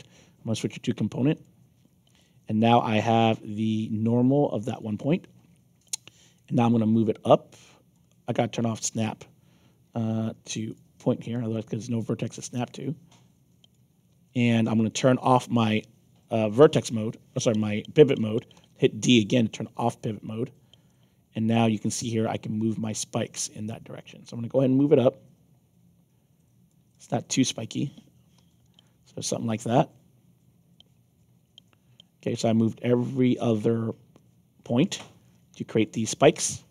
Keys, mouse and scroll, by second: 1.3 click, 2.2 alt+click, 3.0 middle click, 3.5-4.7 alt+drag, 6.3-7.9 drag, 10.6 click, 12.2-13.7 drag, 14.1 ctrl+z, 14.6 alt+click, 15.6 middle click, 16.2 middle click, 18.5 d, 19.1 alt+click, 20.8-26.6 drag, 26.9 alt+click, 28.3 f, 28.8-33.3 alt+drag, 33.7 scroll down 2, 34.1-36.7 alt+drag.